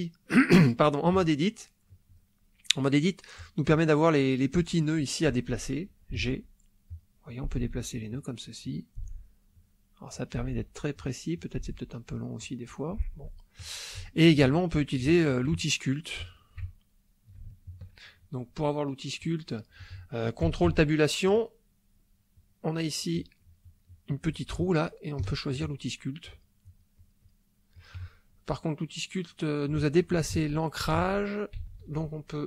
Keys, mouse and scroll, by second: 3.4 click, 6.1 g, 6.8 click, 7.3 click, 7.6 g, 7.9 click, 8.6 click, 8.9 g, 9.5 click, 10.1 click, 10.4 g, 10.9 click, 11.3 click, 11.6 g, 12.3 click, 14.0 shift+middle click, 14.1 shift+click, 14.9 ctrl+shift+middle click, 15.6-16.6 ctrl+shift+middle drag, 16.8-18.0 ctrl+shift+middle drag, 20.7 ctrl+Tab, 25.2 ctrl+click, 26.2 click, 27.7 click, 30.3 ctrl+z.